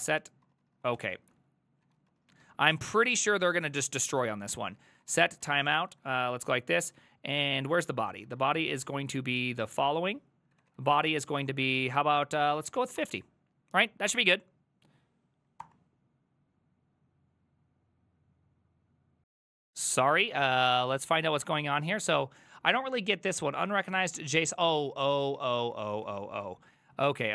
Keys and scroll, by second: 0.0-3.6 typing, 1.0 ctrl+c, 1.2 ctrl+c, 3.7 ctrl+Left, 4.2 ctrl+Right, 4.3-9.1 Left, 4.6 ctrl+w, 4.7-6.6 typing, 7.0 ctrl+Left, 7.4 ctrl+Left, 7.4 ctrl+Left, 7.6 ctrl+Left, 7.8 ctrl+Left, 8.2 Right, 8.3 Right, 8.4 Right, 8.9 Right, 9.1 ctrl+w, 9.2 ctrl+w, 9.4 ctrl+w, 9.5 ctrl+w, 9.8 ctrl+w, 10.3-13.6 typing, 15.6 Return, 21.4 ctrl+a, 21.9 3, 24.5 ctrl+a, 24.7 1, 25.4 ctrl+c, 25.6 ctrl+a, 25.8 2, 26.1 Up, 26.4 Down, 26.8 ctrl+Left, 26.9 ctrl+Left, 27.1 ctrl+Left.